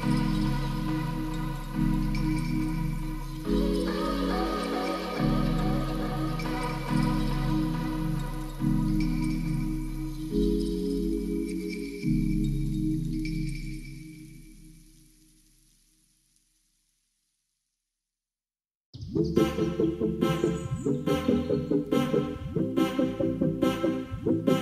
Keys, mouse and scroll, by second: 1.0 click, 1.4 middle click, 1.8 ctrl+b, 3.4 Tab, 4.1 middle drag, 4.9 s, 5.0 x, 5.7 middle drag, 6.1 Tab, 6.2 click, 6.8 g, 6.9 y, 7.4 click, 7.5 Tab, 7.8 middle click, 8.0 ctrl+s, 8.6-9.0 drag, 10.9-12.8 typing, 12.4 shift+middle click, 13.7 click, 14.0 middle drag, 14.3 ctrl+s, 14.9-15.5 middle drag, 16.0 click, 16.4 shift+a, 17.8 click, 18.1 alt+r, 18.5 alt+g, 18.9 y, 20.0-20.3 middle drag, 20.5-22.9 typing, 21.2 ctrl+click, 22.7 Return, 24.0 click, 24.3-24.6 drag.